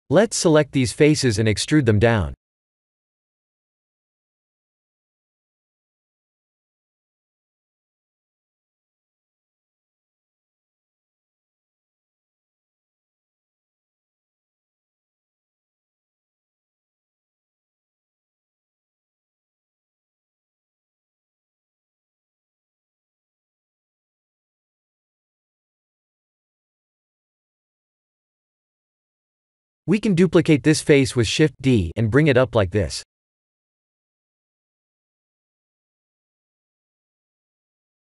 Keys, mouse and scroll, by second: 1.5 c, 6.7 middle click, 8.3 e, 11.1 middle click, 12.1 KP_3, 12.5 shift+z, 13.4 s, 14.7 ctrl+z, 15.3 e, 16.3 s, 21.0 middle click, 21.7 Tab, 22.2 shift+z, 22.5 middle click, 25.9 Tab, 27.8 KP_3, 29.0 shift+z, 30.7 shift+d, 35.0 middle click, 36.9 shift+z, 37.8 s.